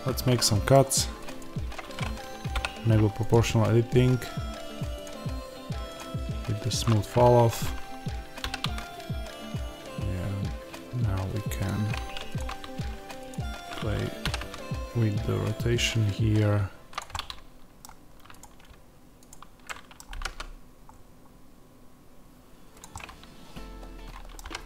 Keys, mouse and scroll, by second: 0.0 Escape, 0.0 middle click, 0.4 middle click, 1.3 click, 2.4 o, 4.9-11.6 drag, 8.3 r, 14.1 r, 16.9 click, 17.0-18.3 middle drag, 18.3 click, 20.1 g, 22.7 click, 22.9-24.6 middle drag, 24.4 g.